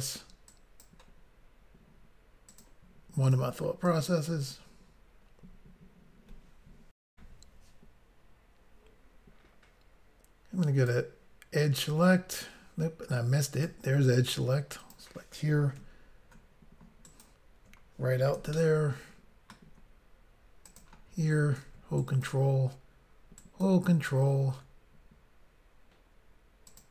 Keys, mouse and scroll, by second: 0.6 click, 2.6 click, 2.7 click, 3.3 click, 3.4 click, 3.9 click, 7.1 Insert, 8.2 Pause, 10.8 click, 10.9 click, 13.5 click, 13.6 click, 14.8 click, 17.1 ctrl+right click, 18.5 shift+middle click, 20.7 click, 22.0 ctrl+right click, 23.4 ctrl+right click, 26.7 click, 26.8 click.